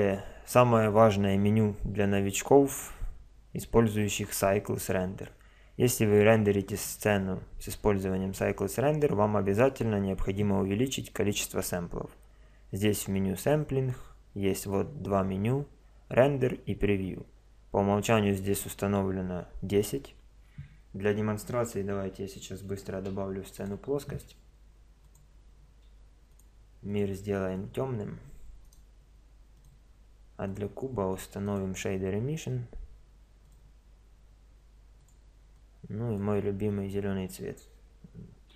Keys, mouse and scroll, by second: 0.0 Escape, 6.7-8.7 drag, 8.7-9.3 middle drag, 9.3-21.7 drag, 21.7 KP_0, 22.9 shift+a, 24.1 s, 26.3 click, 28.7 click, 29.6-30.5 middle drag, 30.5-33.1 drag, 35.0-36.7 drag.